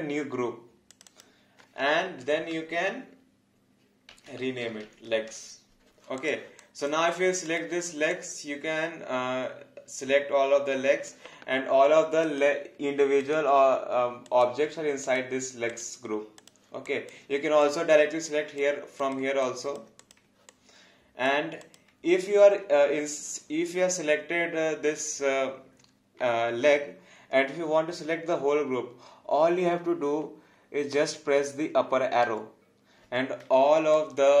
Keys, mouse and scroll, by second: 0.9 click, 4.2-5.4 typing, 6.2 click, 6.6 alt+click, 8.1 alt+click, 16.9 alt+click, 18.3 alt+click, 19.4 alt+click, 20.5 alt+click, 34.0 alt+click.